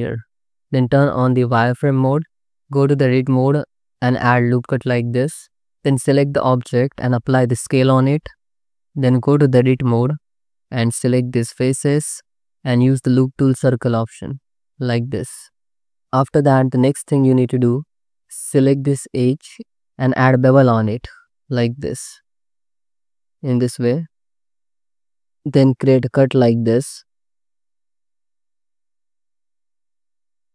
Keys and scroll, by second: 3.0 Tab, 4.1 ctrl+r, 7.2 ctrl+a, 9.1 Tab, 20.1 ctrl+b, 23.7 1, 27.0 space, 29.8 space.